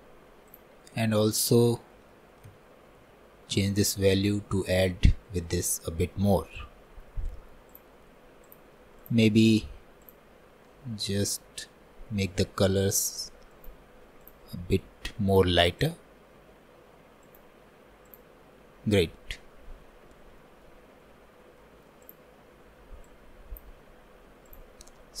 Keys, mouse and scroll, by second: 8.6-10.1 drag, 15.4-18.9 drag, 18.9-19.3 scroll down 2, 19.3-20.1 scroll up 1, 20.1-20.5 scroll down 1, 20.5-23.2 shift+middle drag, 23.2-25.2 drag.